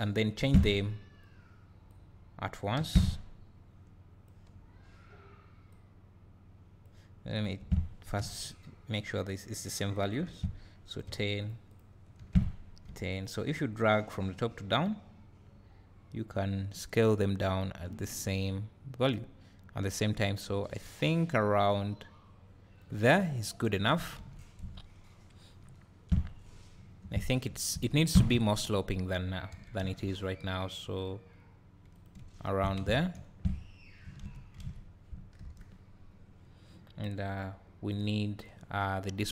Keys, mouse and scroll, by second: 11.4 click, 13.1 click, 15.0-21.6 drag, 23.1-24.1 scroll down 2, 24.1-24.6 scroll down 1, 24.6 KP_0, 24.9-26.0 drag, 25.6 `, 26.3-26.8 scroll up 2, 26.8 scroll down 2, 27.0 Tab, 27.9 1, 28.4 alt+click, 29.5 g, 32.8 Tab, 34.6 alt+a, 35.4 KP_0.